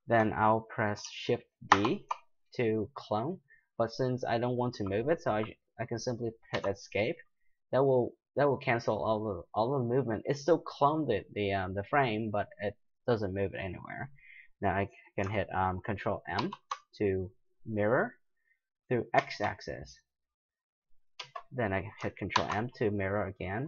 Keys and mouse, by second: 1.7 shift+d, 16.4 ctrl+m, 22.3 ctrl+m.